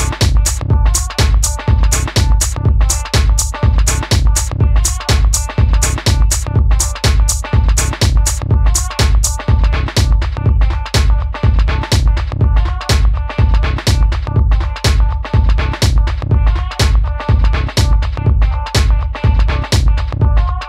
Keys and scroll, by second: 8.4 Left, 8.5 Left, 19.3 Down, 19.6 Right, 19.7 Up.